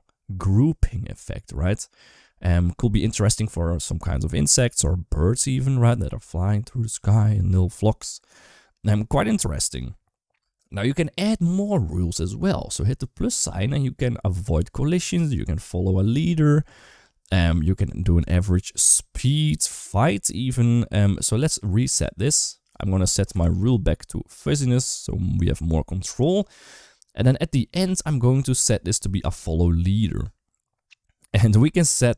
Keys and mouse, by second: 9.5-9.9 right drag, 10.2 space, 12.4-19.2 drag, 20.5 click, 22.5 click, 23.4 click, 24.2-24.7 drag, 26.1 click, 27.8-29.3 drag.